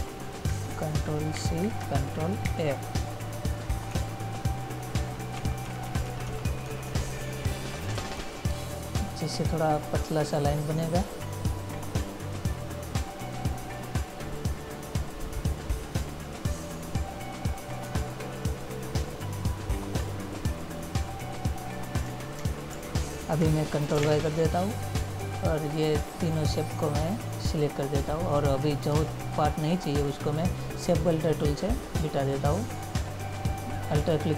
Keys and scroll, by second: 1.5 ctrl+c, 2.6 ctrl+f, 4.0 Up, 5.1 Right, 8.3 Right, 18.0 Right, 22.5 ctrl+-, 24.2 ctrl+y.